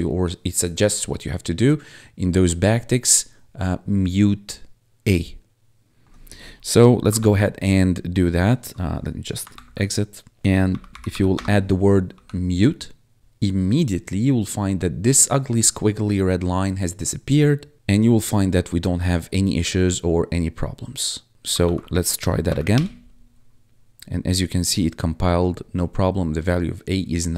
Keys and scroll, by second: 7.1 ctrl+`, 9.7 1, 10.6 m, 11.3 space, 12.0 ctrl+s, 21.5 ctrl+`, 22.4 Up, 22.6 Return.